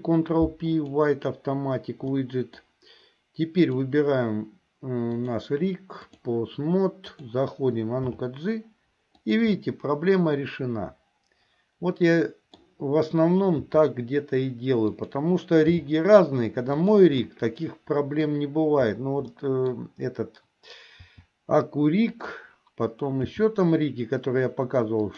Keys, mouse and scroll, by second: 2.2 middle click, 5.2-6.4 drag, 7.2 click, 8.2 g, 9.7-12.8 middle drag, 13.8 r, 15.9 g, 17.3-18.5 middle drag, 19.4 scroll up 1, 19.5 middle click, 19.9 scroll down 1, 21.2 r, 23.5 g.